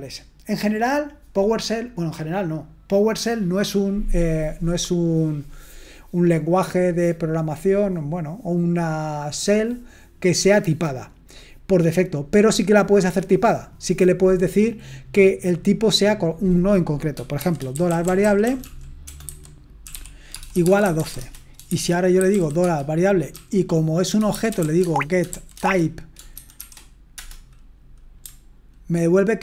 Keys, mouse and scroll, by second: 17.1-27.2 typing, 17.1 scroll down 1.